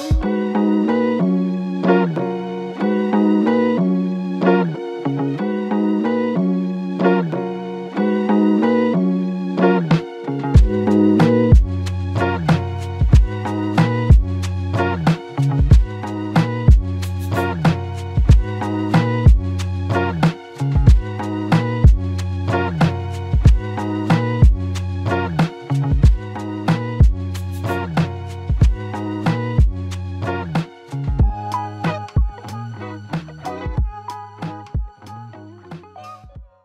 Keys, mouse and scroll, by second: 24.6 q, 29.2 alt+click.